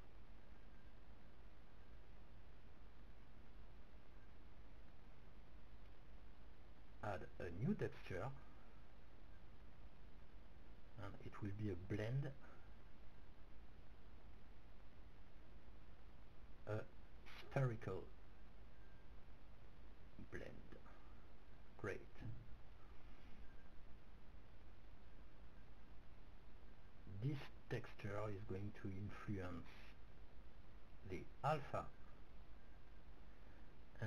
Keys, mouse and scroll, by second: 1.2-4.6 middle drag, 4.8-7.3 drag, 8.3-10.5 drag, 10.7-13.7 drag, 15.5-17.8 middle drag, 17.1-18.3 drag, 18.4 click, 22.1-27.1 middle drag, 27.4-29.6 middle drag, 30.7-32.7 drag, 33.5-34.0 drag.